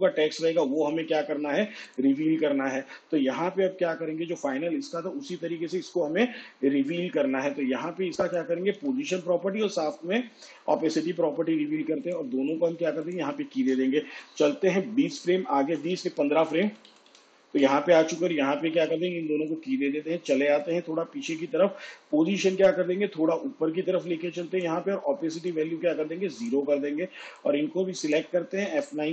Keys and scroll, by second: 9.6 p, 11.7 shift+t, 15.2 shift+Page_Down, 17.1 ctrl+Right.